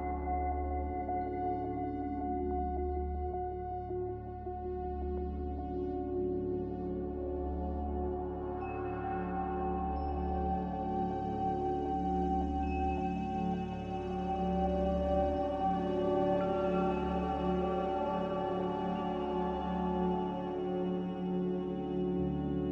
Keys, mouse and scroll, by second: 0.0-3.0 typing, 1.3 Tab, 18.3 z, 21.5-22.7 typing.